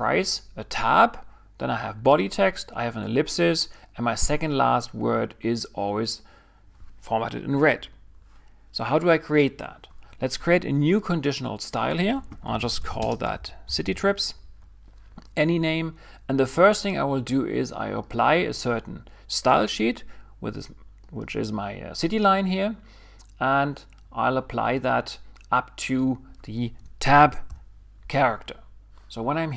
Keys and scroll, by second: 12.2-14.3 typing, 27.2 alt+shift+\, 27.3-28.6 typing.